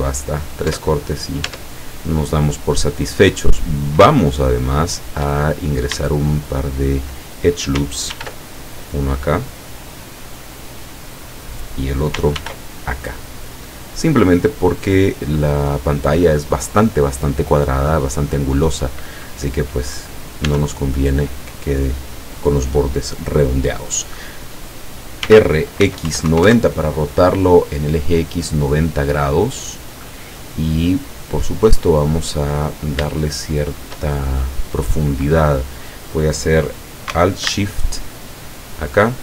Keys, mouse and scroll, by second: 0.7 Tab, 2.1 Tab, 3.7 scroll up 2, 3.9 scroll down 2, 4.4-5.2 shift+middle drag, 5.5-6.0 shift+scroll up 3, 6.3-7.0 shift+middle drag, 8.2 ctrl+r, 8.9 click, 11.3 click, 12.4 ctrl+r, 12.9 ctrl+click, 15.0 click, 18.1-18.6 scroll down 2, 20.6 l, 25.3 r, 25.9 x, 26.1 KP_9, 26.4 KP_0, 26.5 KP_Enter, 27.9 scroll down 1, 29.5 scroll down 1, 29.6 scroll up 1, 31.1 scroll up 1, 31.3-32.5 middle drag, 33.3 shift+middle click, 34.9 right click, 38.2 alt+shift+right click.